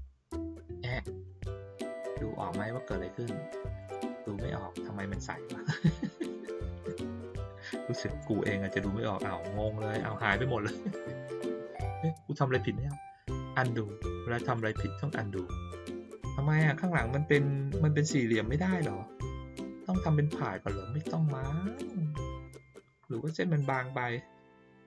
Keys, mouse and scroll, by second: 3.8 click, 5.1 click, 6.8 click, 7.3 click, 9.5 click, 9.9 click, 14.5 click, 15.7 click, 16.1 click, 21.7 click.